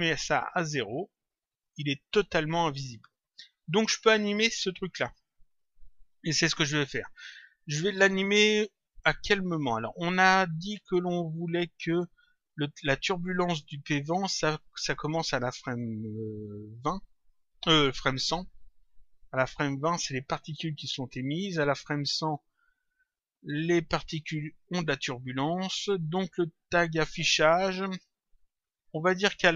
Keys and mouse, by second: 0.3 click, 1.6 click, 4.4 click, 28.7 click.